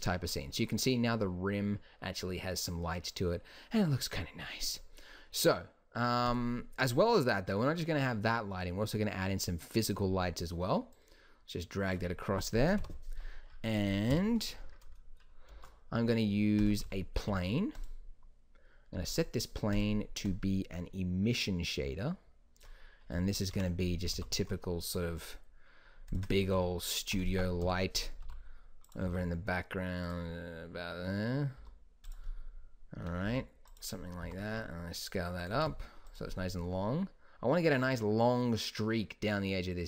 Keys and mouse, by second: 6.4-8.2 drag, 11.0 click, 12.9 KP_7, 14.2 KP_5, 15.6 shift+a, 17.4 g, 23.6 KP_3, 24.3 r, 26.6 g, 27.8 KP_7, 28.4 g, 29.2 r, 31.8 s, 33.4 s, 34.4 s, 35.7 g.